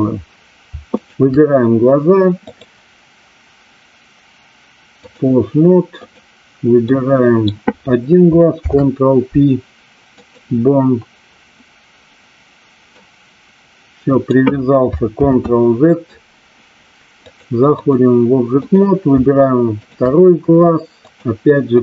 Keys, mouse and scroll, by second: 2.6-5.2 drag, 6.0 click, 6.8-7.4 middle drag, 8.6 ctrl+p, 13.0-14.2 drag, 15.2 ctrl+z, 17.3 click, 18.6 click, 19.7 shift+click, 21.0-21.8 drag.